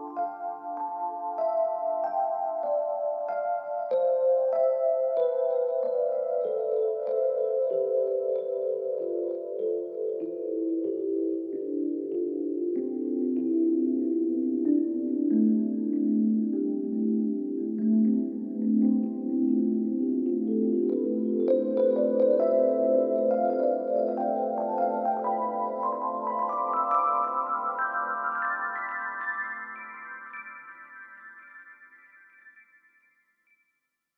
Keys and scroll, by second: 21.0 Escape.